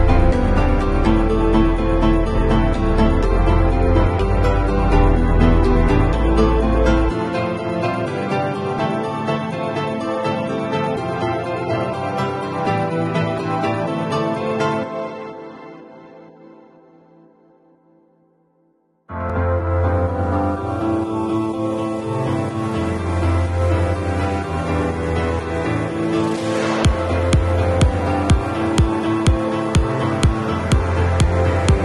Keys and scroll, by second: 0.3 w, 15.3 v, 22.1 super+t.